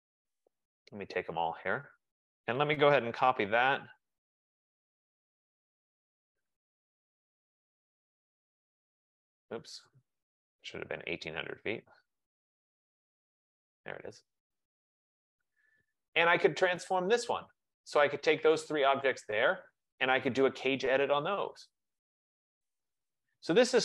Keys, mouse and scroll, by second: 0.8 click, 2.0 shift+click, 2.7-4.9 typing, 5.5 click, 6.7-8.7 typing, 8.8-10.6 drag, 12.0-15.0 typing, 15.1 Escape, 15.8 Escape, 16.9 click, 17.7 click, 18.9 click, 22.1 click.